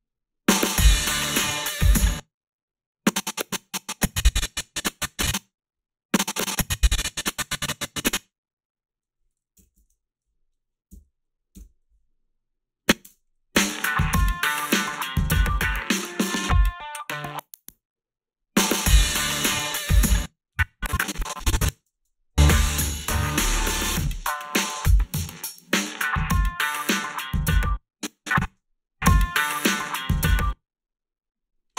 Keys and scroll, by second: 1.9 space, 9.8 1, 11.5 Return, 13.0 space, 20.0 space, 21.8 space, 27.5 space, 28.4 space, 30.2 space.